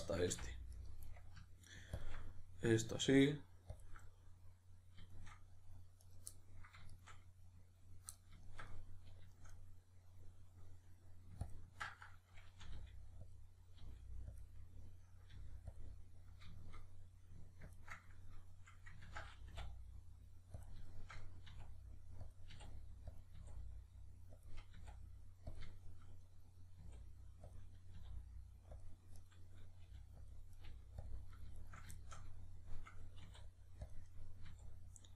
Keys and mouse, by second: 0.3 f, 0.8 right drag, 2.0 ctrl+drag, 2.2-3.8 middle drag, 3.8-4.1 ctrl+drag, 4.1-6.0 middle drag, 6.0 right click, 6.4-6.9 middle drag, 6.9 shift+right click, 8.2-11.4 shift+middle drag, 11.4-12.6 ctrl+drag, 12.6 r, 13.4 click, 13.8 g, 14.4 click, 15.4 g, 15.8 click, 16.0-17.7 middle drag, 17.7-19.0 ctrl+drag, 19.0 ctrl+z, 20.7 click, 20.9-22.3 shift+middle drag, 21.5 e, 22.3 click, 22.5 e, 23.2 click, 23.3 e, 24.5 click, 24.7 e, 25.5 click, 25.7-31.1 shift+middle drag, 26.8 e, 27.6 click, 28.0 r, 28.8 click, 29.2 right click, 29.8 g, 30.3 click, 30.6 right click, 30.7 g, 31.1 click, 31.3 right click, 31.6 shift+right click, 32.0-34.0 shift+middle drag, 33.2 e, 34.0 click, 34.1-35.1 middle drag, 34.5 e.